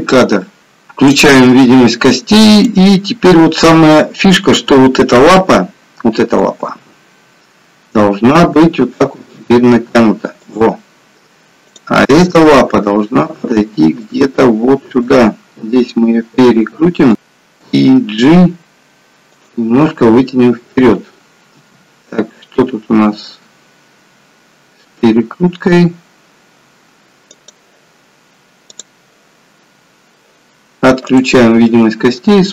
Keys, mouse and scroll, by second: 1.2 click, 2.6 click, 6.9 g, 11.8 click, 12.4 g, 15.1 r, 18.0 g, 21.9 r, 31.3 click, 31.7 middle click.